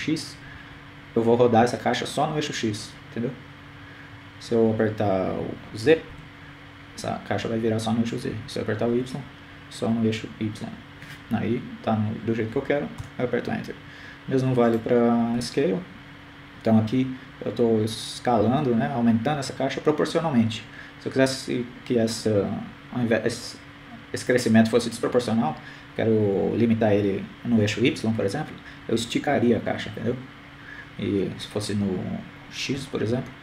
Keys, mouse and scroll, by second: 16.6 right click, 17.6 s.